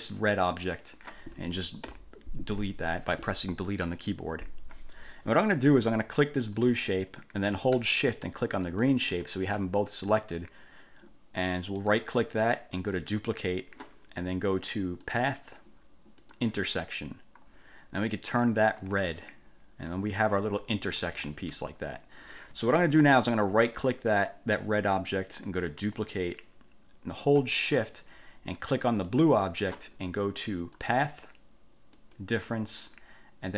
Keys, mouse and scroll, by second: 0.4-1.4 drag, 2.0 Delete, 6.6 click, 8.8 shift+click, 12.0 click, 13.1 click, 15.2 click, 16.4 click, 19.0 click, 20.0-21.2 drag, 21.2 ctrl+z, 23.9 click, 26.0 click, 29.3 shift+click, 31.0 click, 32.2 click.